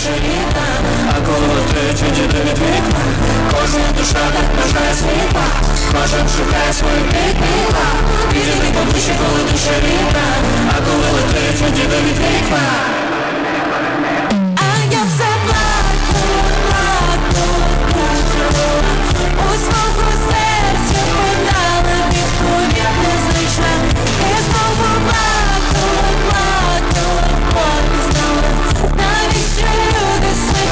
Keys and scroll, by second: 0.0 Page_Down.